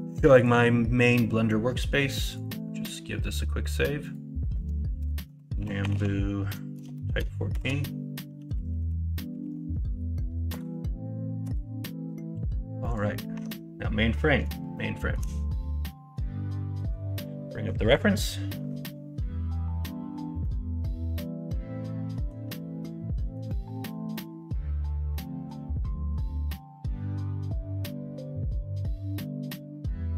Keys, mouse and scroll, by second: 13.3 Tab, 14.7 shift+middle click.